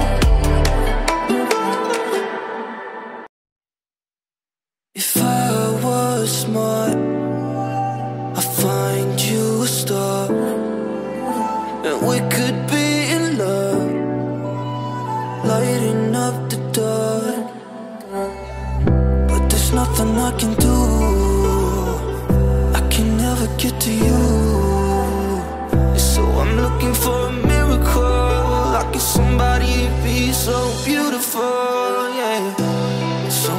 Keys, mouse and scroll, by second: 6.1 ctrl+d, 7.2-8.3 click, 9.1 ctrl+d, 9.5 alt+scroll down 1, 10.9-11.3 alt+scroll up 1, 12.6 alt+scroll down 1, 13.6-14.1 alt+scroll up 1, 14.1 alt+scroll down 1, 14.4 alt+scroll up 1, 16.8 ctrl+j, 17.8 click, 21.4 click, 29.5 click.